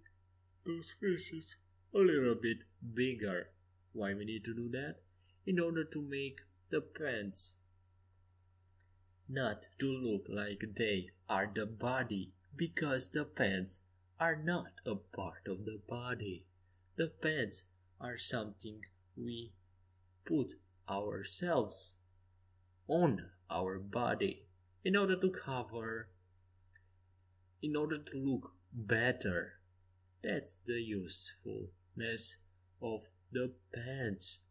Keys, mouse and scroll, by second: 1.6-3.0 middle drag, 3.0 ctrl+z, 10.1 e, 12.1 s, 21.3-24.0 middle drag, 23.0 ctrl+z, 25.9 e, 29.0 ctrl+z, 29.5 ctrl+z, 29.9 ctrl+z, 32.1-33.9 drag.